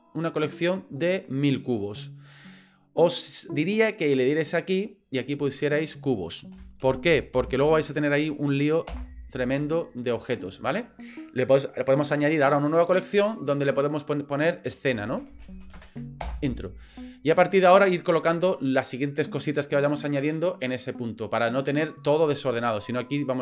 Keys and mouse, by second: 4.6 click, 5.3 click, 5.5 click, 9.8 click, 11.4 click, 13.5 click, 13.7 click, 17.1 click, 17.5 click.